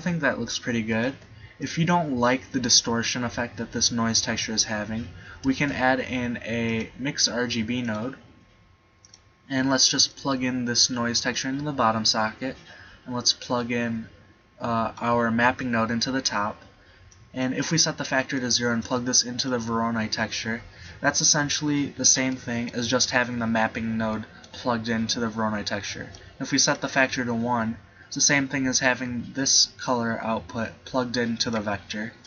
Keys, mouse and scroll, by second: 1.2 click, 1.2 g, 5.6 shift+a, 10.8 click, 12.1-13.5 middle drag, 13.6-15.0 drag, 15.4-17.2 middle drag, 22.4-26.2 middle drag, 27.6 click, 28.9-30.6 drag.